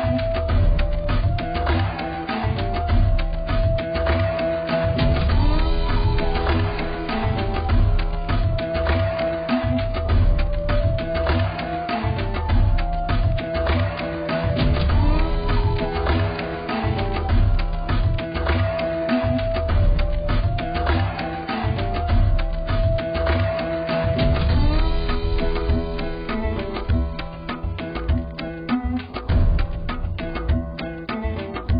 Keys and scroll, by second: 2.1 z, 23.5 x.